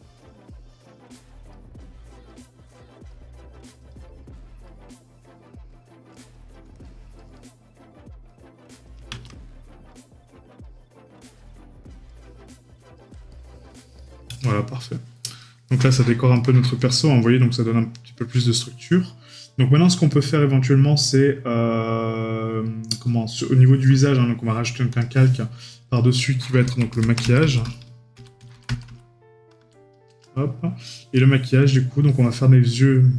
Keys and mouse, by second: 13.3 right click, 14.8 middle click, 15.4 right click, 31.1 right click.